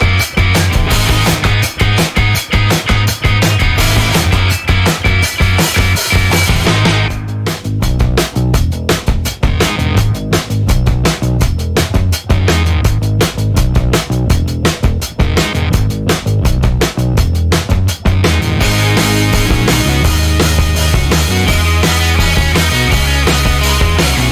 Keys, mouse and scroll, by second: 2.4-4.1 typing, 5.7 click, 6.3-7.3 typing, 7.8 click, 9.4 click, 10.4 0, 11.1 click, 11.4 1, 11.8 click, 12.7 click, 13.7 click, 15.2 click, 15.9-17.7 drag, 19.0 click, 20.2 click, 20.7 click, 21.9 click, 22.2 space, 22.7 click, 23.5 click, 23.7 space, 24.2 click.